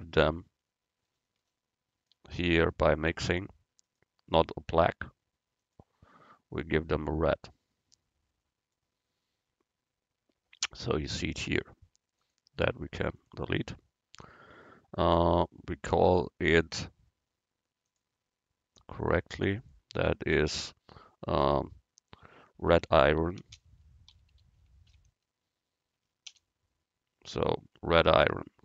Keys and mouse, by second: 3.9-5.8 drag, 12.3-15.1 drag, 16.0 middle click, 16.2-18.1 drag, 19.7-21.5 drag, 28.1-28.6 middle drag.